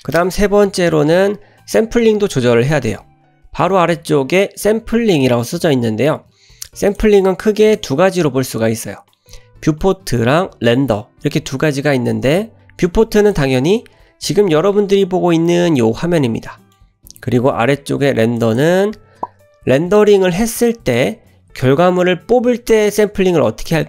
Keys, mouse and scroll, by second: 6.9 click, 7.6 click, 13.2 click, 15.5-16.7 middle drag, 18.3 click.